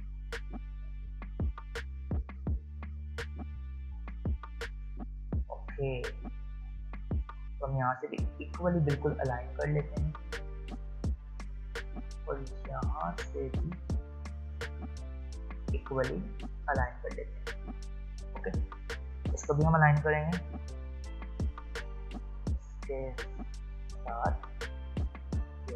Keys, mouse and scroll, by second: 4.0 click, 5.8 alt+scroll down 1, 7.2 alt+scroll up 1, 8.2-11.4 drag, 13.3-13.7 alt+scroll up 1, 14.0 alt+scroll down 1, 15.1 alt+scroll up 1, 15.7-17.0 drag, 18.1 alt+scroll down 1, 18.7 click.